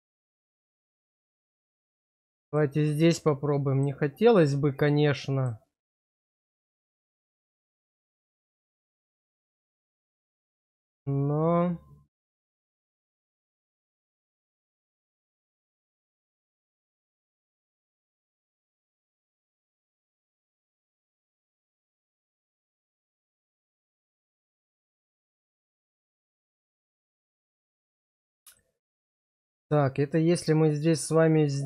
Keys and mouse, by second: 0.3 shift+click, 1.2 middle click, 3.2 click, 4.6 click, 8.2 shift+click, 9.1-19.5 drag, 20.6 shift+click, 21.3-27.2 drag, 28.6-30.4 middle drag, 31.0-31.6 middle drag.